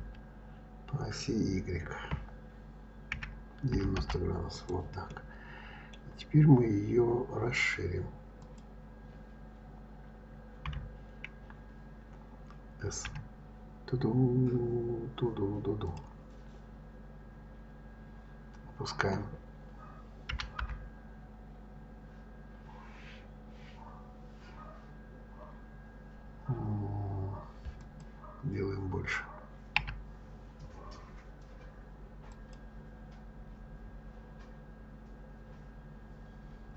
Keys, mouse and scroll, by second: 5.1-8.1 middle drag, 8.4 click, 10.7 KP_3, 13.1 s, 16.7 scroll down 4, 20.3 g, 29.8 s.